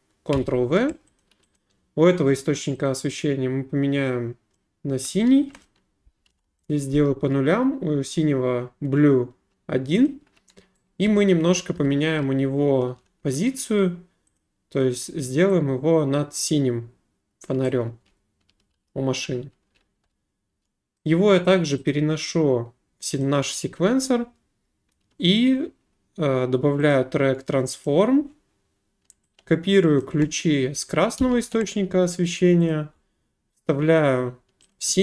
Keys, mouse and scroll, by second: 0.3 ctrl+v, 1.2 click, 1.5 click, 2.9 click, 4.5 click, 5.6 right click, 6.3 0, 6.7 right click, 10.0 right click, 11.1-13.0 typing, 13.5 right click, 14.4 click, 17.4 click, 17.8-20.6 typing, 21.0 right click, 21.5 click, 21.9 click, 23.2 click, 25.4 click, 26.9 click, 27.8 click, 30.0 click, 31.2 ctrl+c, 32.7 click, 33.7 click, 34.7 click.